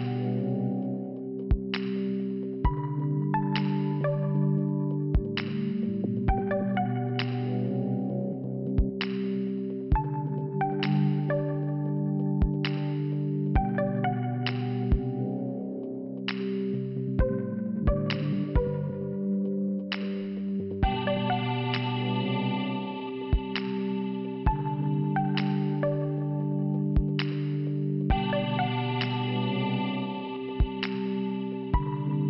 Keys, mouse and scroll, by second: 0.9 click, 1.9 click, 2.0 click, 3.5 click, 4.2 click, 4.2 click, 5.0 scroll down 1, 5.6-5.9 scroll down 1, 5.9 click, 6.0 click, 7.3 Return, 7.3 click, 7.9 click, 8.9 click, 9.5 click, 10.3 click, 10.4 click, 10.9 click, 11.0 click, 11.4 click, 11.6 click, 12.4 click, 12.5 click, 13.7 click, 13.9 click, 14.7 click, 14.8 click, 18.0 click, 19.2 click, 20.5 click, 20.6 click, 22.0 scroll down 1, 22.5 click, 22.6 click, 22.7 click, 22.8 double click, 24.0 double click, 24.1 double click, 25.0 middle click, 26.0 scroll up 1, 26.8 scroll up 1, 27.5 click, 27.6 click, 28.5 click, 28.5 click, 29.3 5.